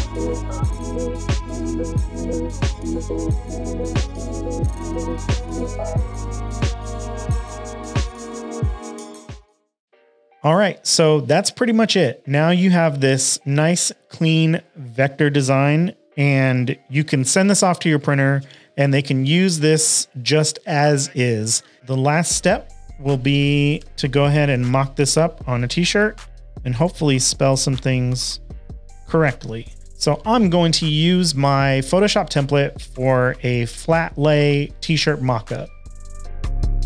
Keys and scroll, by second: 3.4 shift+super+a, 3.5 v, 7.0-7.8 typing, 9.7 v, 9.8 space, 16.3 super+s, 22.8-25.1 typing.